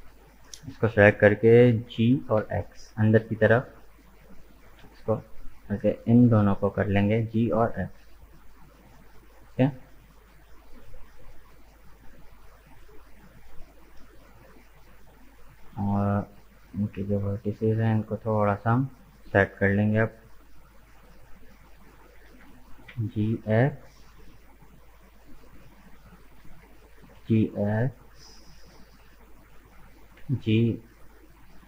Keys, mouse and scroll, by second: 0.0-0.4 scroll up 2, 1.9 g, 5.9 right click, 6.4 shift+right click, 7.2 g, 11.9-14.9 middle drag, 16.1 click, 16.5-18.7 middle drag, 18.7 right click, 19.3-20.9 middle drag, 20.9 KP_1, 22.2 g, 25.7 right click, 26.4 g, 29.3 right click, 30.2 g.